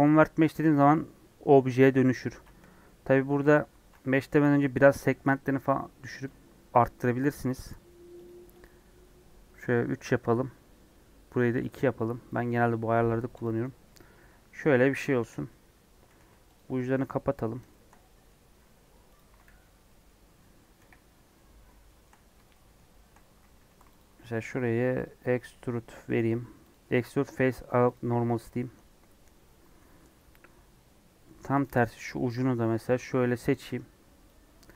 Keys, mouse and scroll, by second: 0.0 right click, 0.1 Tab, 0.4-2.1 middle drag, 2.1 ctrl+z, 2.7 Tab, 3.3 ctrl+z, 3.5 ctrl+z, 5.4-13.3 drag, 13.3 right click, 13.6 Tab, 13.8-15.2 middle drag, 15.2 KP_1, 16.0 2, 16.6 alt+click, 17.0 f, 17.7-19.1 shift+middle drag, 19.1 alt+click, 19.4 f, 19.8 middle click, 20.1 scroll down 1, 20.8 KP_1, 21.8 shift+middle click, 22.0 scroll up 3, 22.5-23.5 shift+middle drag, 23.5 3, 24.0 alt+click, 25.0 alt+e, 27.1 scroll down 2, 27.4 middle click, 27.9 click, 28.0 Tab, 28.3 scroll down 2, 30.2 Tab, 30.5 scroll up 1, 31.5 KP_1, 32.6 alt+z, 34.2 Left.